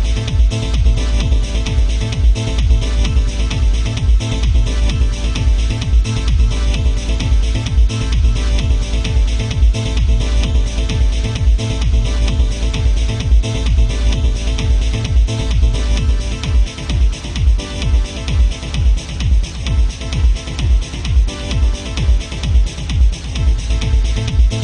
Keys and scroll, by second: 7.8 ctrl+z, 12.3 ctrl+z, 22.0 ctrl+z, 23.9 alt+space.